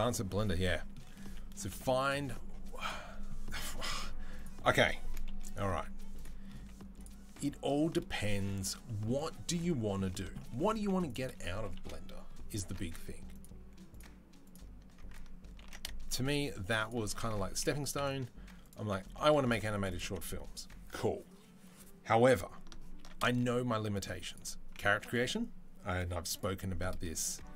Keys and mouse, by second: 2.6 click, 5.1 KP_3, 5.5 z, 6.4-11.6 middle drag, 6.4 z, 10.6 z, 11.6 KP_3, 13.1 alt+click, 14.3 alt+click, 15.4 ctrl+b, 19.6 alt+click, 22.8 ctrl+b, 24.2-27.5 middle drag, 24.8 Delete.